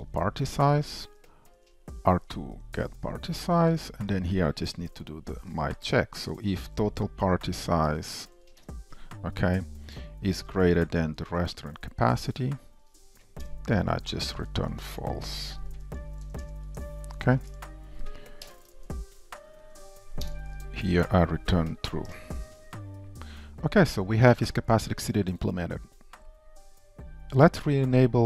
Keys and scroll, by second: 0.8 Return, 2.8 Return, 13.5 Return, 16.9 shift+Return, 19.3 ctrl+y, 19.3 super+BackSpace, 22.2 Return, 24.2 ctrl+shift+Up, 26.2 ctrl+shift+Up.